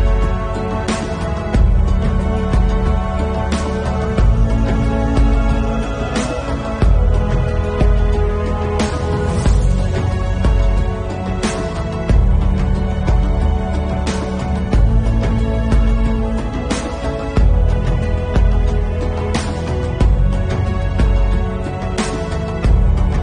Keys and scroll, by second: 0.1 ], 4.4 ctrl+s, 5.2 ctrl+s, 5.8 ctrl+alt+z, 6.0 ], 7.0 ctrl+s, 7.4 ctrl+s, 8.3 Left, 9.1 Left, 9.7 Left, 10.3 Left, 11.8 Left, 12.4 Left, 13.0 Left, 14.8 ctrl+u, 17.8 ctrl+u, 20.5 Delete, 20.5-21.4 typing, 21.5 Return, 21.7 ctrl+s.